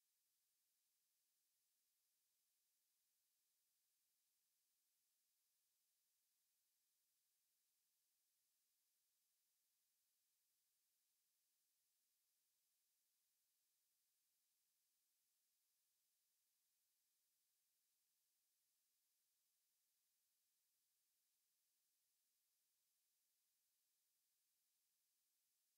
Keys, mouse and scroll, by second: 1.2-5.8 drag, 7.1-10.6 drag, 12.8-14.8 drag, 18.1-20.0 drag, 20.0-22.0 drag, 22.1-23.7 drag, 24.1-25.0 middle drag.